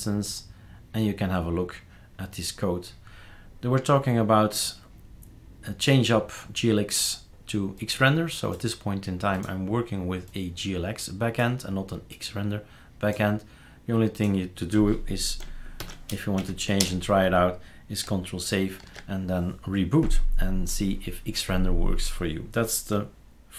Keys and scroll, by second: 15.8-16.8 typing, 16.3 Down, 18.8 ctrl+s.